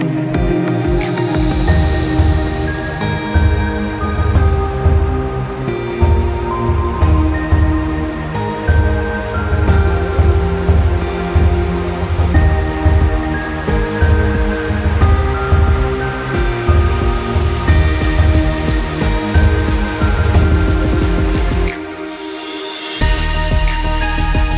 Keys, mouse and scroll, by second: 0.6 scroll up 1, 1.1 space, 1.2 click, 1.5 space, 2.7 click, 12.8 click, 13.8 alt+scroll down 1, 14.3 space, 14.4 click, 16.2 Delete, 17.6 click, 19.1 Delete, 19.6 click, 21.1 shift+click, 22.0 click.